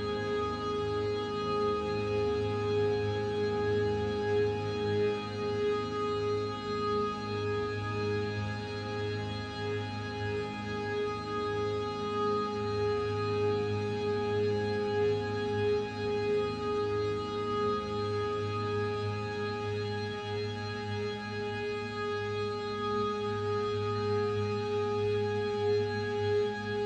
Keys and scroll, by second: 4.5 ctrl+0.